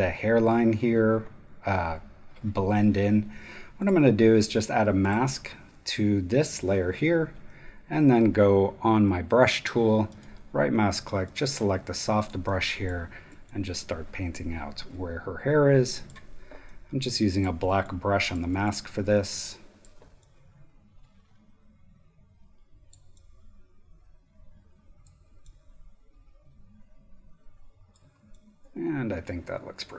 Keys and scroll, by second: 7.5 b.